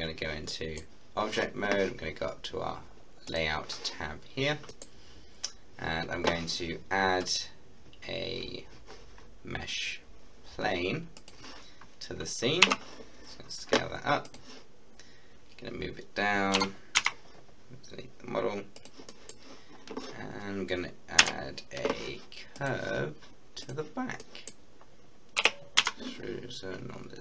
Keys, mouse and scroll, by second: 0.2 scroll down 1, 0.5 middle click, 0.6-3.1 middle drag, 3.3 click, 4.8 middle click, 5.2-7.0 scroll down 1, 7.2 click, 11.2 click, 12.7 s, 14.3 click, 14.7 scroll down 1, 16.5 g, 17.0 z, 18.7 click, 19.1 middle click, 21.2 Tab, 22.5 click, 24.2 middle click, 24.7-25.4 scroll down 1, 25.4 e, 25.8 z.